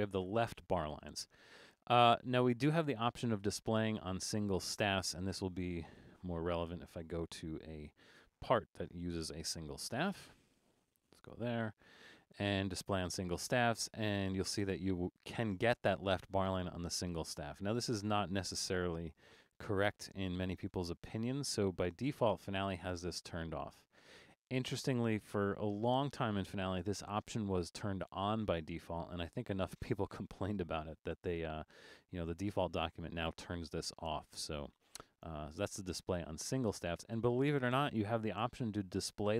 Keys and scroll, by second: 6.7 alt+super+., 8.9 super+=, 10.9 alt+super+a.